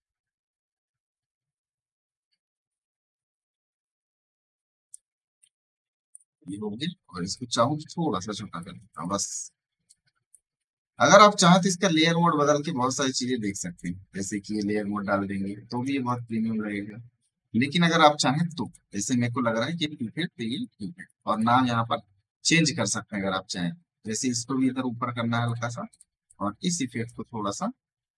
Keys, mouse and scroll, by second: 6.1 v, 7.2-8.8 shift+drag, 9.3 e, 9.8 click, 10.3 v, 11.5 click, 15.8 space, 16.0 right click, 16.2 click, 17.2 alt+scroll down 1, 17.5 alt+scroll up 1, 18.3 right click, 18.5 click, 18.6 click, 19.8 alt+scroll down 1, 20.4 right click, 20.9 space, 21.0 right click, 21.0 space, 21.2 click, 21.2 space, 23.4-27.5 drag, 27.5 alt+scroll down 1.